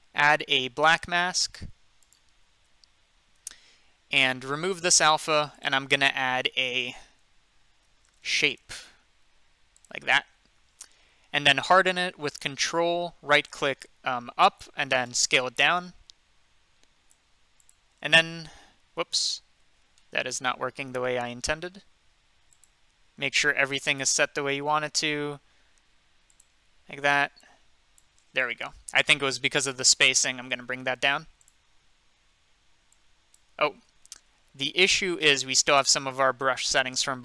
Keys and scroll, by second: 6.9-8.8 typing, 28.7 ctrl+z, 33.7 ctrl+z, 34.0 ctrl+z.